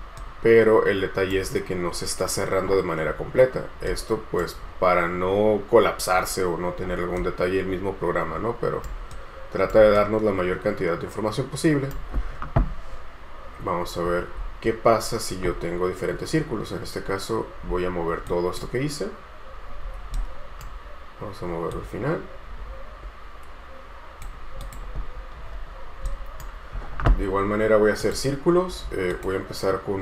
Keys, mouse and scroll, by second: 0.4 right click, 3.3-4.1 scroll up 1, 4.1 right click, 6.3-7.4 scroll down 1, 7.4 right click, 13.5-14.8 scroll down 1, 20.4 right click, 25.3 scroll up 1, 26.3 right click.